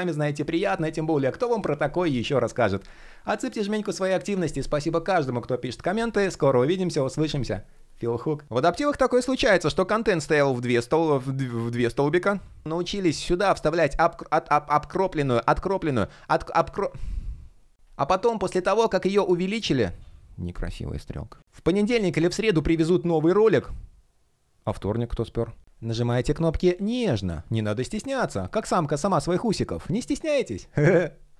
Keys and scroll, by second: 9.2 shift+3, 11.8 super+z, 13.5 shift+p, 15.4 super+z, 17.6 alt+shift+p, 18.3 shift+p.